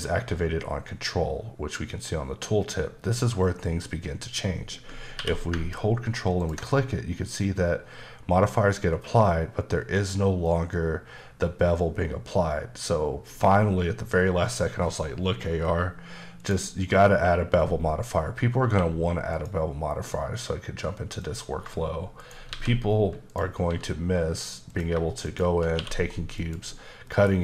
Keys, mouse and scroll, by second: 5.2 q, 6.4 click, 7.4-9.5 scroll down 1, 16.4 click, 18.6 q, 19.3 click, 21.2 click, 22.2 shift+right click, 22.5 shift+a, 23.3 click, 23.6 s, 24.7 click, 25.2 shift+click, 25.8 q, 26.3 click, 27.0 middle click.